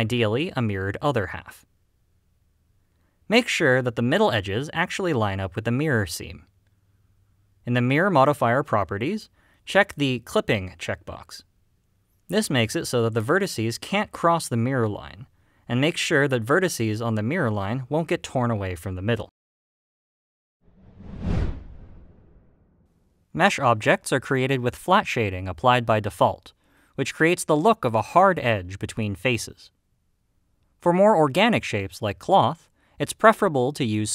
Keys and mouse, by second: 0.7 click, 1.2 middle click, 2.5 click, 2.8 middle click, 3.3 g, 4.0 right click, 5.4 click, 5.7 g, 6.4 right click, 13.8 middle click, 14.1 g, 15.9 right click, 17.2 click, 18.3 click, 19.6-20.8 drag, 23.8 click, 25.1 click, 25.5-27.0 middle drag.